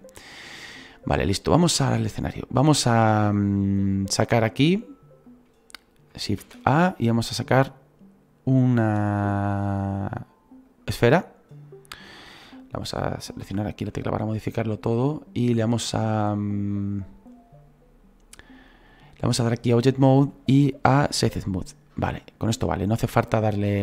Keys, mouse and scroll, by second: 4.7 middle click, 5.4 click, 11.6-11.9 scroll up 4, 12.1 scroll down 2, 13.4 /, 14.5 scroll down 1, 21.2-23.8 drag.